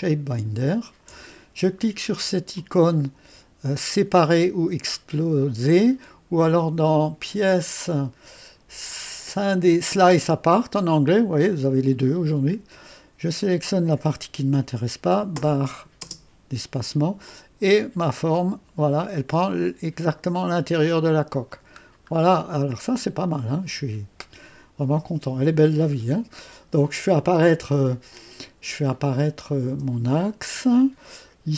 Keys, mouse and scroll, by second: 0.0 click, 2.5 click, 7.2 click, 10.6 click, 13.4 click, 17.2-21.5 drag, 21.6 click, 22.4 click, 29.3 click, 29.8 space, 30.6 click, 31.3 click.